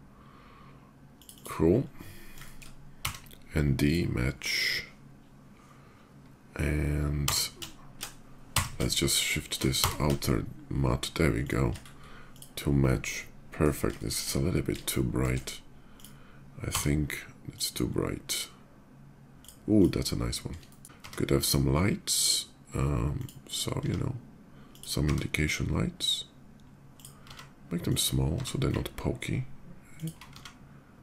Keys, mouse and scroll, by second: 0.9 shift+click, 1.1 shift+click, 1.4 shift+middle click, 3.0 d, 3.6 click, 4.5 middle click, 7.0 d, 8.2 d, 9.4 d, 10.4 shift+middle click, 10.8 shift+d, 11.2 click, 11.6 shift+middle click, 12.0 shift+click, 12.2 shift+middle drag, 12.8-13.4 shift+middle drag, 13.7 shift+middle click, 14.5-15.0 shift+middle drag, 15.7 shift+click, 16.5 d, 17.3 click, 19.2 click, 19.5 click, 20.4 shift+middle click, 20.8 d, 21.9 click, 22.9 click, 24.5 click, 25.5 d, 25.7 click, 26.7-27.7 drag, 27.6 s, 29.7 ctrl+g, 29.7 ctrl+click, 30.9 click, 30.9 s.